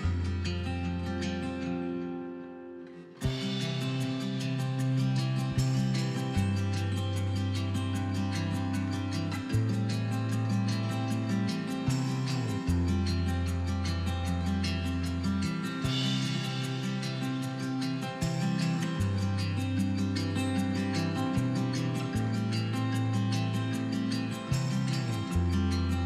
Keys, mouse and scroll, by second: 0.3-0.8 drag, 1.2 shift+click, 3.6 click, 4.1 click, 4.8 shift+click, 5.5 g, 6.6 click, 6.7-7.1 scroll down 1, 7.1 click, 7.3 scroll up 1, 7.6 scroll down 1, 7.9-10.8 middle drag, 9.7 scroll up 2, 10.8-12.1 drag, 12.1 x, 13.5 middle click, 14.1-17.6 middle drag, 16.2 KP_1, 17.6 click, 19.2 e, 20.8 click, 20.9-24.4 middle drag, 23.9 scroll down 2, 24.4 click, 24.6-26.0 middle drag.